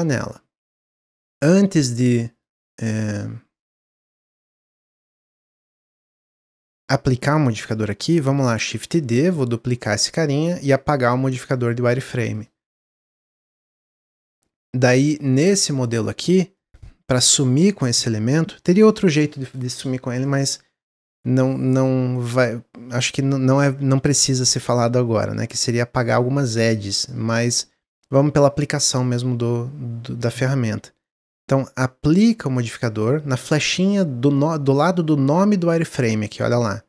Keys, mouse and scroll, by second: 0.4 Tab, 0.9 Tab, 1.3-1.7 scroll down 1, 1.7-2.4 middle drag, 2.4-2.8 scroll up 1, 2.8-5.1 middle drag, 5.1 click, 6.1 Tab, 6.5 Tab, 8.5 shift+d, 11.3-12.3 drag, 12.6-13.2 middle drag, 13.2 click, 13.5-16.2 middle drag, 16.2 scroll down 2, 16.5-19.7 middle drag, 22.2-25.2 middle drag, 25.3-28.3 middle drag, 31.4-33.4 drag, 33.7 click, 36.0-36.8 drag.